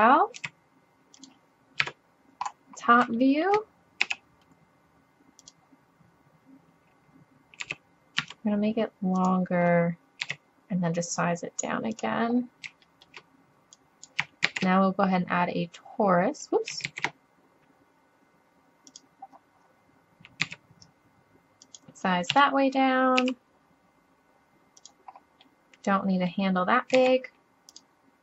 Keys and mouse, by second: 0.4 s, 1.2-1.8 drag, 1.8 KP_7, 2.8 middle click, 4.1 g, 7.7 s, 10.3 s, 12.4 middle click, 12.4 middle click, 12.9-13.7 drag, 14.0 middle click, 14.5 shift+s, 16.0 middle click, 16.9 shift+a, 19.3 middle click, 20.5 s, 21.7 click, 22.4 KP_3, 23.2 g, 24.9 drag, 27.0 s, 27.6 click.